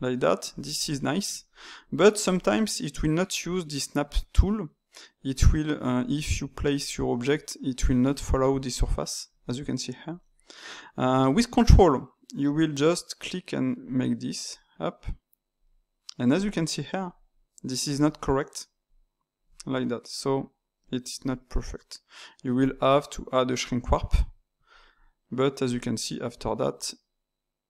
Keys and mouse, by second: 0.8-5.2 ctrl+middle drag, 5.2-6.2 drag, 6.2-13.1 middle drag, 13.1-18.5 ctrl+drag, 18.8 ctrl+click, 19.6-22.5 middle drag, 22.5 click, 23.5-26.2 drag, 26.2 ctrl+z.